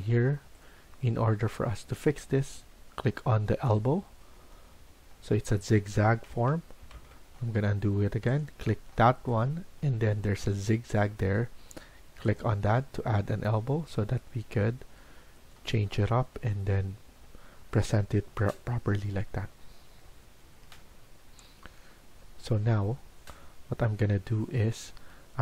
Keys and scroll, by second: 0.0-0.8 typing, 6.2 ctrl+z, 6.9 ctrl+z, 16.1 Escape, 20.4 Escape, 20.7 Escape.